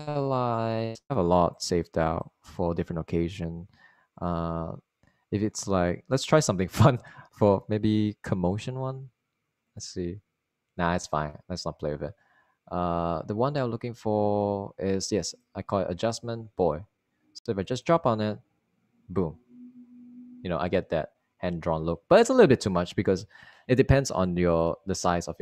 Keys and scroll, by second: 25.2 space.